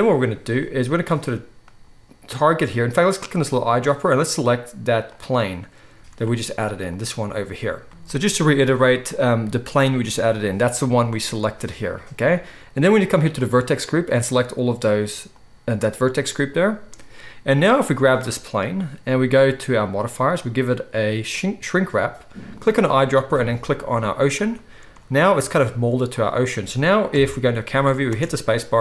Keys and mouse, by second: 3.0-13.3 right drag, 5.9 z, 13.3-18.1 middle drag, 18.1-19.8 right drag, 19.8 middle click, 19.9-20.4 right drag, 20.4-22.6 middle drag, 22.6-28.8 right drag, 27.1 KP_0, 28.1-28.8 middle drag, 28.1 space.